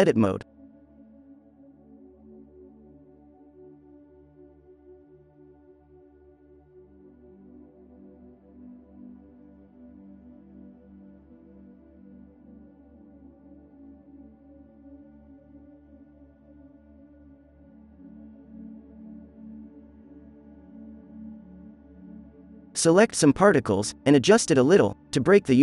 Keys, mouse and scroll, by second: 0.3 click, 0.5 click, 2.8 f, 5.8 f, 6.3 f, 10.0 f, 11.7 click, 13.3 click, 14.9 f, 15.4-16.4 drag, 15.4 f, 16.4 middle click, 16.5-18.0 drag, 17.7 alt+a, 20.7 alt+a, 21.1 b, 21.5-23.5 middle drag, 22.0 alt+a, 22.4 b, 23.5 ctrl+l, 25.1 r.